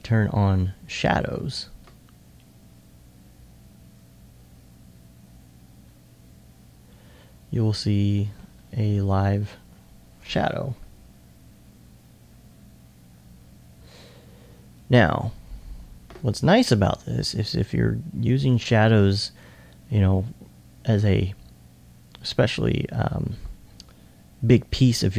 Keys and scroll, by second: 10.7 2, 11.1 2, 16.9 r, 19.0 e.